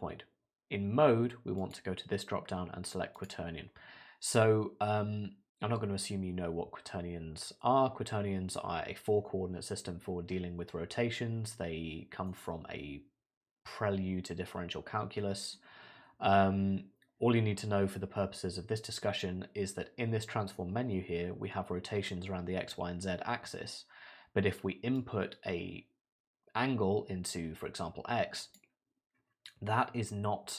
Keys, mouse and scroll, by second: 12.3 middle click, 25.0 click.